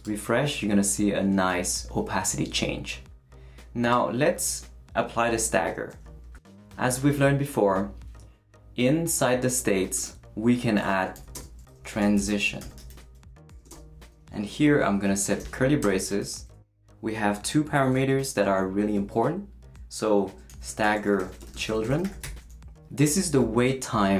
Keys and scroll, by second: 11.1-14.0 typing, 15.4 shift+[, 15.8 shift+Return, 16.6 Return, 20.0-22.6 typing.